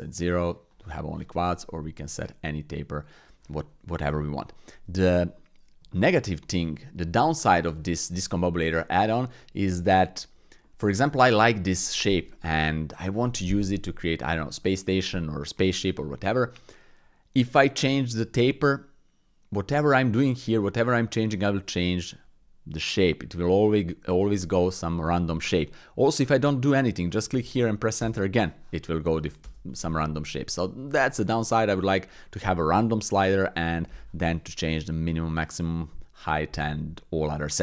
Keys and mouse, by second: 1.6 click, 4.4 middle click, 5.3 click, 5.9 shift+click, 6.4 click, 9.9 click, 10.6 click, 11.2 click, 12.3-13.1 middle drag, 15.2 middle click, 27.0 click, 29.2 click, 30.1-31.0 middle drag.